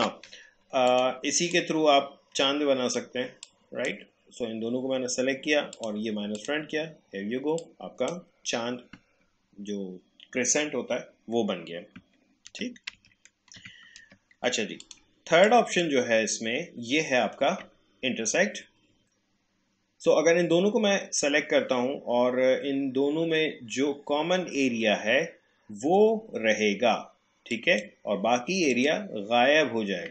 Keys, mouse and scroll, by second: 0.9-10.5 drag, 12.1 ctrl+click, 12.5 ctrl+z, 14.0 ctrl+z, 14.8-18.4 drag, 27.5 click.